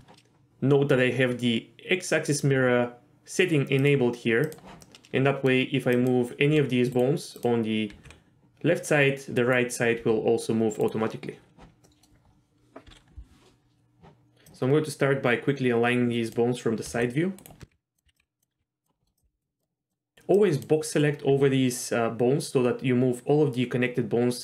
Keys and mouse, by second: 3.8 click, 4.4 click, 4.8 middle click, 6.0 click, 6.4 g, 7.9 g, 10.0 g, 11.8 middle click, 12.8 KP_3, 14.5-16.3 drag, 16.8-19.5 typing, 19.0 shift+middle click, 19.1 click, 19.6 click, 19.9 click, 20.4 click, 21.3 g.